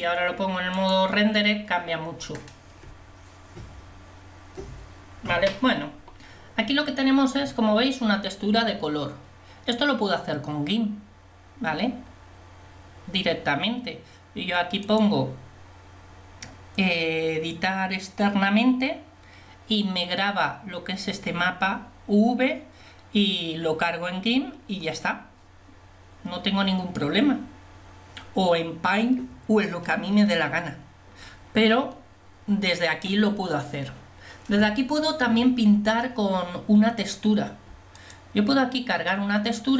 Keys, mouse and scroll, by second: 1.0 click.